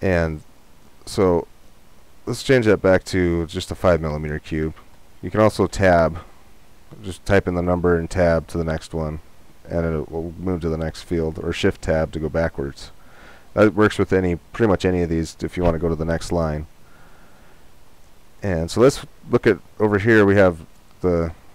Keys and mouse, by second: 2.6-4.3 drag.